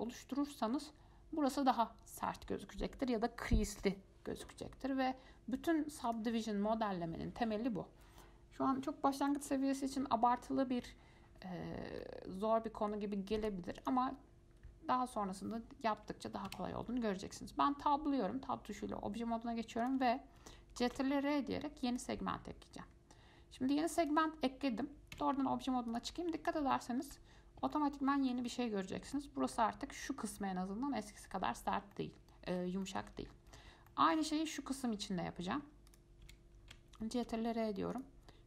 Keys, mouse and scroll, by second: 4.7 click, 6.3 click, 12.2-13.6 middle drag, 13.6 click, 14.0 click, 16.7 Tab, 20.0 click, 21.1 ctrl+r, 25.4 Tab, 26.1 click, 26.9 alt+middle click, 27.6-27.9 scroll down 2, 27.9 shift+middle click, 28.8-29.3 scroll up 5, 29.3-31.5 shift+middle drag, 31.5-32.1 scroll down 7, 32.1-33.5 shift+middle drag, 33.5-34.1 scroll up 6, 34.1 shift+middle click, 34.4 shift+scroll down 1, 34.6 scroll up 1, 35.7-36.1 scroll down 2, 36.1 click, 36.4 Tab, 37.4 ctrl+r.